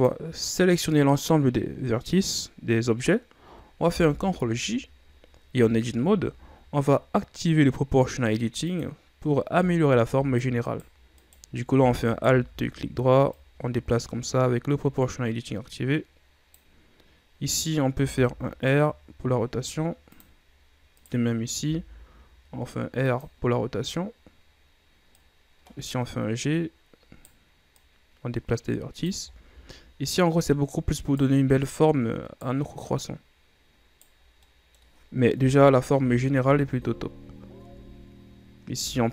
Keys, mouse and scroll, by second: 4.1 ctrl+j, 5.7 Tab, 6.2-6.7 ctrl+scroll down 2, 6.7-7.9 scroll up 1, 8.8 click, 10.7 right click, 11.3 right click, 12.2 alt+right click, 12.7-13.2 shift+scroll up 4, 13.5-16.6 drag, 17.6 right click, 18.1 r, 21.1 right click, 21.8 r, 24.5-25.2 scroll up 2, 25.2 right click, 27.9 right click, 29.4-30.2 shift+scroll down 4, 30.2 right click, 31.7 right click, 33.1 right click, 34.4 scroll down 5, 34.6 middle click, 35.5 KP_1, 36.1 Tab, 36.6 a, 37.2-37.8 scroll up 3, 37.8 Tab, 38.8 a.